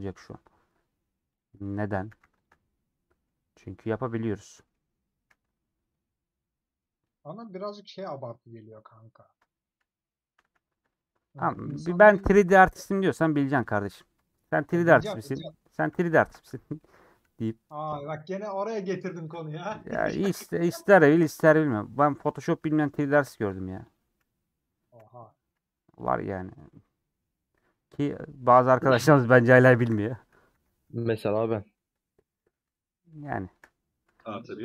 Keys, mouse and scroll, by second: 1.5 ctrl+click, 2.1 a, 5.3 middle click, 5.8 Tab, 5.8 scroll down 2, 6.0-9.8 middle drag, 9.8 /, 10.9 middle click, 11.3 click, 12.1 /, 12.5 middle click, 12.8 scroll up 1, 12.9 middle click, 13.3 Tab, 14.0 middle click, 14.6 shift+click, 15.1-16.3 middle drag, 16.3 /, 16.7 middle click, 17.3 2, 17.5-18.3 scroll up 1, 18.4 alt+click, 18.9 a, 21.7 Tab, 22.3 /, 22.5-23.0 scroll down 2, 23.0 click, 23.5 middle click, 23.8-24.9 drag, 24.9 /, 25.3 middle click, 25.6 Tab, 26.3 scroll down 2, 26.8-29.8 middle drag, 29.8 KP_7, 30.5 alt+z, 33.1 middle click, 34.0 KP_7, 34.3 scroll up 2.